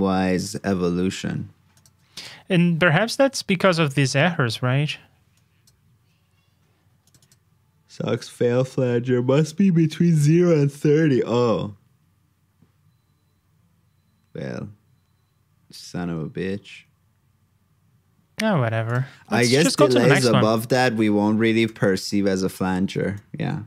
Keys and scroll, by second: 20.5 super+j.